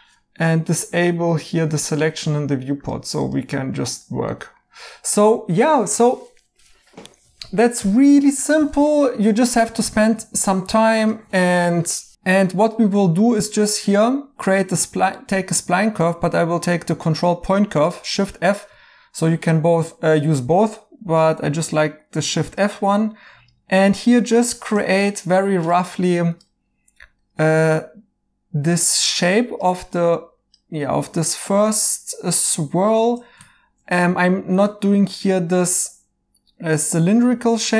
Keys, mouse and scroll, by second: 4.3 right click, 5.7 right click, 8.4 right click, 19.0 Escape, 21.0 f.